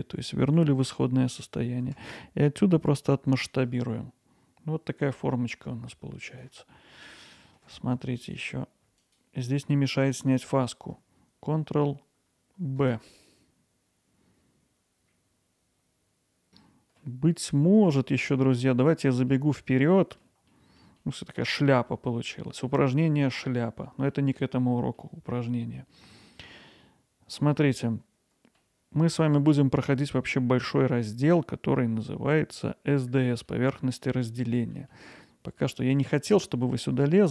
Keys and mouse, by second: 2.0 s, 6.3 click, 6.8 alt+middle click, 7.4 ctrl+alt+middle click, 8.4 click, 12.8 ctrl+b, 16.4 alt+middle click, 17.3 middle drag, 17.8 Tab, 18.4 middle click, 20.6 middle drag, 21.0-22.6 alt+middle drag, 23.1-24.8 middle drag, 25.0-28.6 alt+middle drag, 33.6-34.0 middle drag, 35.8 click.